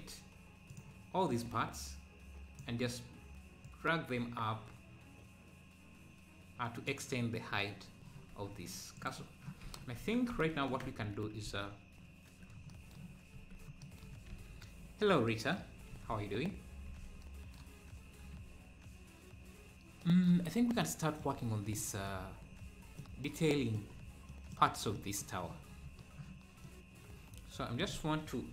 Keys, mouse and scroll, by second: 0.7 click, 7.5-8.1 scroll down 1, 8.3 Tab, 8.9 click, 9.7 ctrl+s, 10.0 Tab, 10.8 Tab, 11.4 ctrl+s, 12.0 `, 13.4 z, 13.9 z, 14.4 ctrl+s, 14.5 scroll up 1, 16.0 ctrl+s, 16.3-16.7 scroll up 1, 16.9 ctrl+s, 20.8 middle click, 21.4 scroll up 1, 21.8 middle click, 22.5 scroll up 1, 23.0 middle click, 24.0 scroll down 2, 24.3-28.5 middle drag.